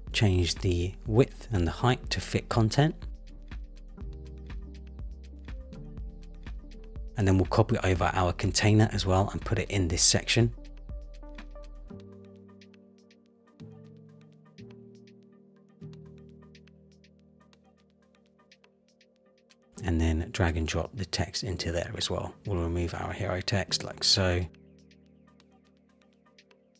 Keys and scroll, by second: 8.6 super+c, 13.2 super+v.